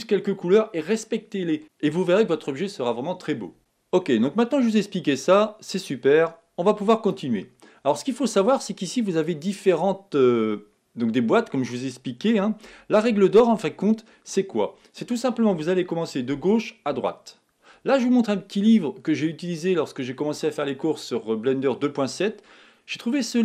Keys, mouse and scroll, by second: 5.9 click, 10.0 click, 13.0 x.